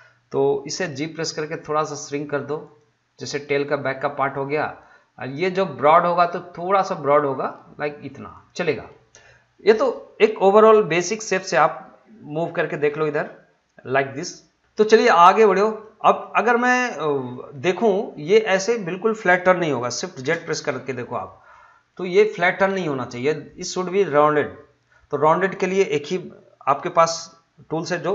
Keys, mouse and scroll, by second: 0.7 g, 2.6-7.2 drag, 7.2 g, 8.3 click, 10.9-14.6 middle drag, 14.7 scroll up 1, 15.0 middle click, 15.6 scroll up 1, 15.8-17.5 middle drag, 17.5-20.2 middle drag, 20.2 shift+z, 20.7 scroll down 1, 21.1-21.5 scroll up 1, 21.5 shift+middle click.